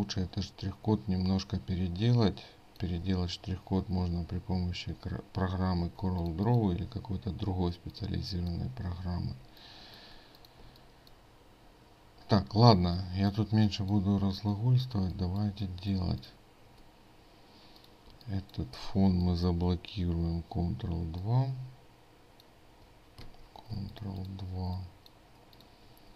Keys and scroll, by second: 5.9 ctrl+space, 23.3 ctrl+2, 23.7 ctrl+space.